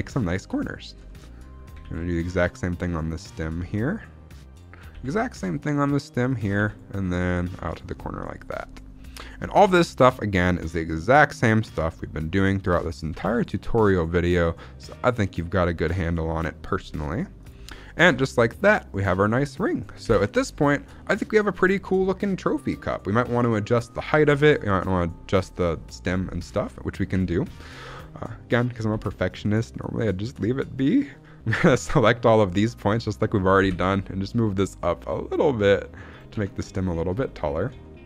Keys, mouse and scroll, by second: 0.1 middle click, 0.5-1.0 scroll down 2, 1.0 shift+middle click, 1.1-1.6 scroll up 2, 1.7 ctrl+r, 4.5 click, 4.8 ctrl+r, 6.2 click, 6.5 ctrl+r, 7.6 click, 7.8 scroll down 1, 8.1 middle click, 8.4-9.0 scroll up 3, 9.1 shift+middle click, 9.3 scroll up 1, 9.8 ctrl+r, 12.8 click, 13.1 ctrl+r, 17.3 click, 17.6-18.0 scroll down 2, 18.0 Tab, 18.3-18.9 middle drag, 19.2-19.9 scroll down 2, 19.9 KP_1, 20.5 shift+middle drag, 21.8-22.6 scroll down 2, 22.6-23.0 scroll up 1, 24.7-25.0 scroll up 1, 26.6-27.0 scroll up 1, 27.1 Tab, 27.4 z, 27.7 alt+a, 28.8 b, 30.6 scroll up 1, 31.8 click, 33.5 g, 34.9 z, 36.0 click, 36.3 Tab, 36.7 z, 36.7 scroll down 2, 37.2 shift+middle click, 37.7-38.0 shift+middle drag.